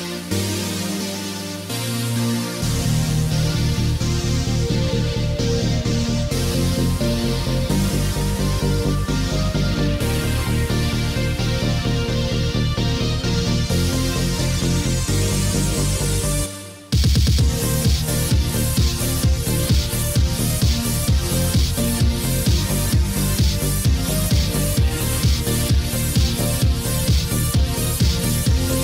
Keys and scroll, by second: 4.2 ctrl+d, 16.5 ctrl+d, 17.9 ctrl+d.